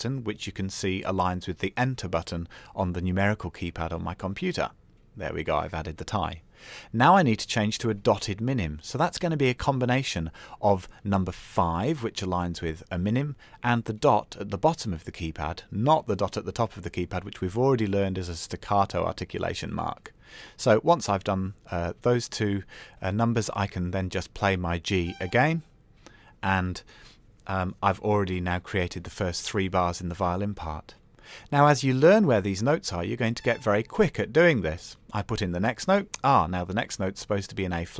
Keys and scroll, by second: 2.1 KP_Enter, 12.2 KP_5, 12.2 KP_Decimal.